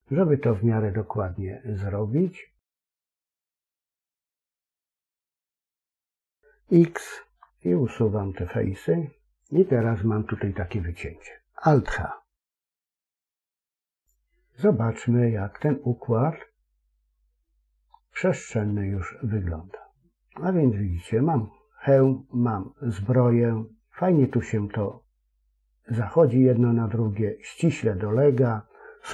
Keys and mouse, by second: 7.2 x, 12.6 alt+h, 15.4-16.4 drag, 19.0-21.3 middle drag, 21.9 middle click, 22.5-28.6 middle drag.